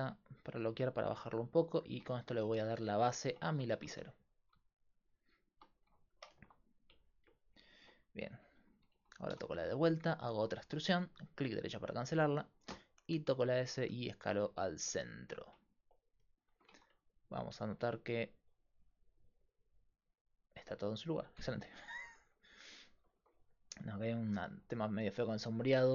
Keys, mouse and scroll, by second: 3.7 g, 9.3 e, 12.7 s, 16.7 Tab, 22.1 Tab, 23.2 Tab.